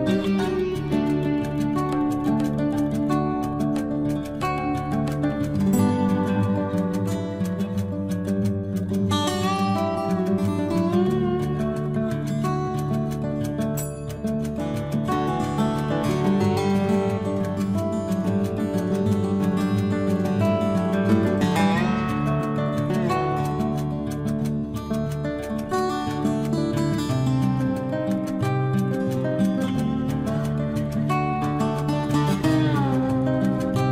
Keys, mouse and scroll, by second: 1.7 scroll up 1, 2.6 click, 7.0 click, 7.4 scroll down 1, 8.3 Escape, 9.8 click, 10.4 space, 10.9 click, 11.0 click, 11.8 Delete, 13.0 click, 13.1 click, 13.4 Delete, 13.8 click, 13.9 click, 14.1 Delete, 14.5 click, 14.5 click, 14.7 Delete, 15.9 ctrl+z, 16.5 click, 17.4 Delete, 18.7 t, 19.9 click, 23.3-23.9 typing, 30.4-32.3 typing, 32.6 Return.